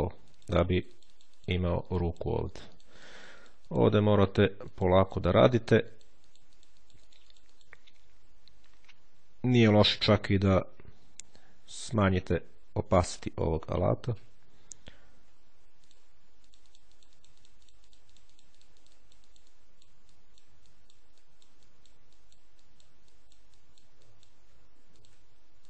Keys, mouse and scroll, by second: 0.1-7.9 drag, 10.1 click, 12.3-14.5 drag, 15.7 ctrl+click, 16.3-20.2 drag, 20.5 click, 21.1 click, 21.5-23.2 drag, 23.4-24.6 drag, 24.8 ctrl+click, 25.5 click.